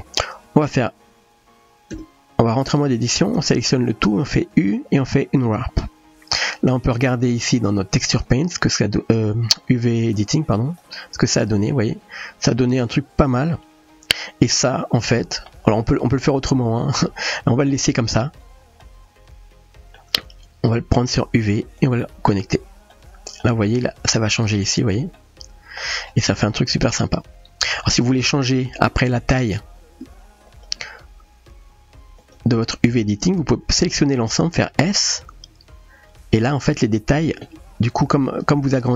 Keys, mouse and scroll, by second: 1.9 Tab, 3.5 a, 8.2 click, 8.2 a, 8.2 u, 10.3 click, 14.9 middle click, 17.6 click, 18.8-20.0 middle drag, 21.2-22.1 drag, 22.9-23.4 middle drag, 25.2-25.8 middle drag, 26.6-27.9 middle drag, 30.6 click, 32.3 click, 33.6 a, 36.1 s, 37.8 g.